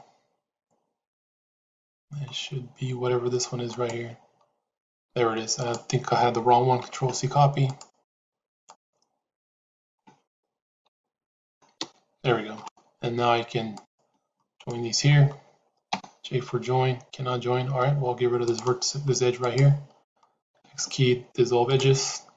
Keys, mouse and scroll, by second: 3.6 click, 5.5-7.8 drag, 7.9 click, 9.7-12.5 drag, 15.8 j, 18.4 click, 19.4 click, 20.3 x.